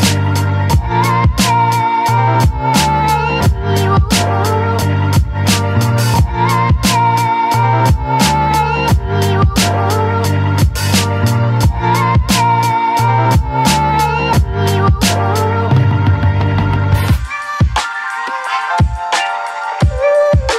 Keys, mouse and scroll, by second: 0.6 right click, 2.3 ctrl+drag, 3.2 right click, 4.2 click, 5.1 click, 5.2 scroll down 1, 5.5 alt+middle click, 5.7 scroll up 1, 5.8 alt+middle click, 6.1 click, 6.9 right click, 8.3 click, 8.7 ctrl+click, 8.9 right click, 9.7 click, 10.3 alt+middle click, 11.1 click, 11.6 right click, 13.2 click, 13.6 ctrl+click, 13.9 shift+click, 14.2 right click, 15.1 click, 16.2 alt+middle click, 16.6 click, 17.0 right click, 17.9 click, 18.4 right click, 18.8 click, 19.3 right click.